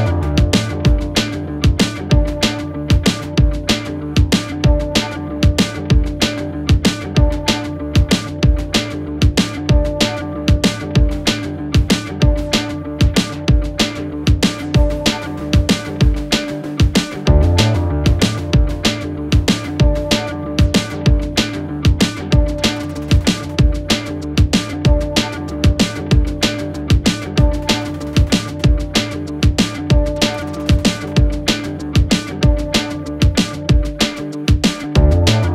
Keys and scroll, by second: 1.5 F4, 4.8 c, 5.8 shift+Page_Up, 7.2 t, 7.5 r, 8.2 Escape, 12.1 F2, 14.3 shift+Page_Down, 23.6 Escape, 24.0 F4, 25.3 F2, 30.3 space.